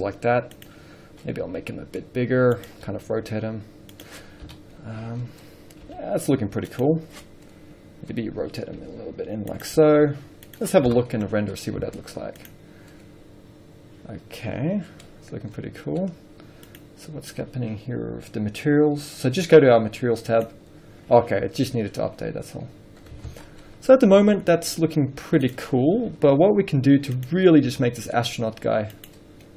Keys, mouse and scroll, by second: 0.9 click, 1.3 scroll up 1, 1.7 s, 2.9 click, 3.1 r, 4.3 click, 4.7 KP_7, 5.5 scroll up 1, 6.2 g, 7.0 click, 9.1 r, 9.9 click, 10.2 g, 10.8 click, 11.1 KP_0, 13.2 z, 13.7-15.1 scroll down 1, 15.1 scroll up 1, 17.0 click, 20.4 scroll down 1, 20.6 click, 22.1 scroll up 1, 23.5 alt+a, 23.9 scroll down 1, 24.8 scroll up 1, 26.1 click, 26.5 g, 28.2 click, 28.5 s.